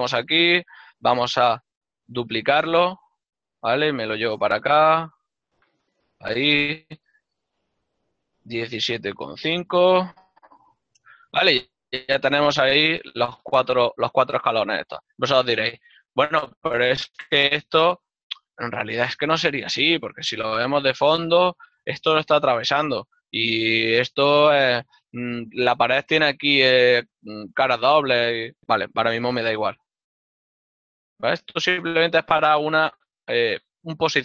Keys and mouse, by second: 4.6 g, 7.0 ctrl+click, 7.8 y, 7.9 KP_0, 10.7 Return, 10.7 KP_Enter, 15.0 middle click, 21.8 click, 26.1 right click, 29.3 z, 31.6 click, 33.0 ctrl+middle click.